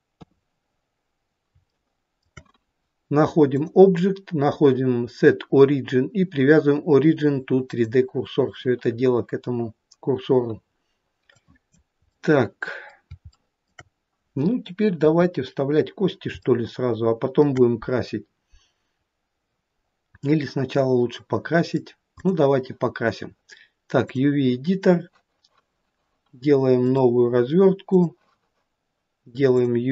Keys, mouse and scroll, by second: 1.7 shift+middle click, 2.3 shift+middle click, 3.6 click, 11.3 click, 12.1 middle click, 12.6 middle click, 13.2 middle click, 13.4 shift+middle click, 13.8 shift+middle click, 15.0 KP_1, 16.5 shift+middle click, 20.3 middle click, 20.3-21.3 scroll up 1, 21.3 middle click, 22.2 click.